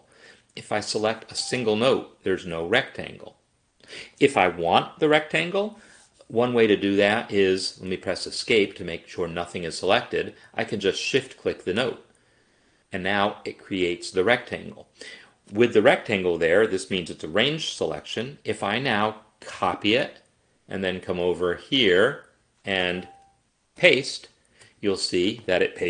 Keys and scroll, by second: 7.7 Escape, 7.9 Escape, 8.1 Escape, 8.2 Escape, 19.6 ctrl+c, 23.8 ctrl+v.